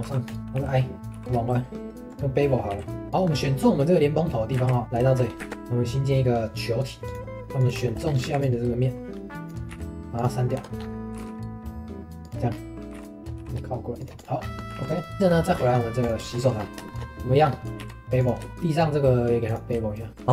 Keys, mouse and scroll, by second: 1.9 ctrl+z, 2.2-2.7 middle drag, 2.7 q, 3.1 middle click, 3.3 scroll up 2, 3.8 middle click, 4.6 shift+s, 5.0 shift+middle click, 5.3 scroll up 1, 5.4 shift+a, 7.6 click, 7.8 shift+middle click, 8.0 scroll up 3, 8.2 3, 8.4 click, 9.7 x, 10.6 Tab, 10.8 scroll up 2, 11.1 g, 12.5-12.9 scroll down 1, 12.9 g, 14.2 click, 14.4 scroll down 2, 14.6 middle click, 14.7 ctrl+s, 15.1 scroll up 3, 15.2 shift+middle click, 15.5 scroll down 4, 15.7 middle drag, 16.0 click, 16.2-16.6 shift+middle drag, 16.6 scroll up 3, 16.8-17.4 shift+middle drag, 17.4-17.8 scroll up 1, 17.8 q, 20.1 shift+middle click, 20.2 ctrl+s.